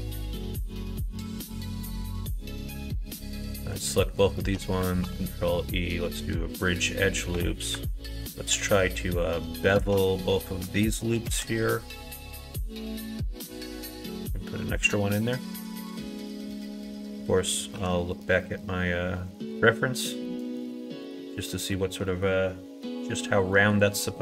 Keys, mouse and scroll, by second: 0.0 middle click, 0.4 middle click, 1.4 2, 2.2 alt+click, 3.1 alt+click, 5.0 ctrl+e, 6.8 middle click, 7.3 2, 9.7 alt+shift+click, 10.0 middle click, 11.2 ctrl+b, 21.7 middle click, 23.5 middle click, 24.0 middle click.